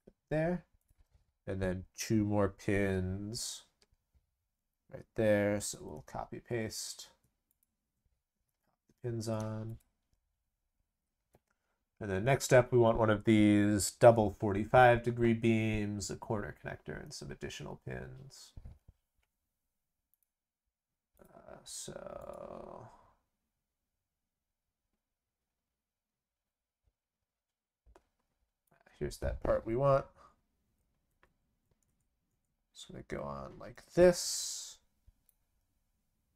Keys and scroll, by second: 5.7 ctrl+c, 5.9 ctrl+v, 8.4 ctrl+v.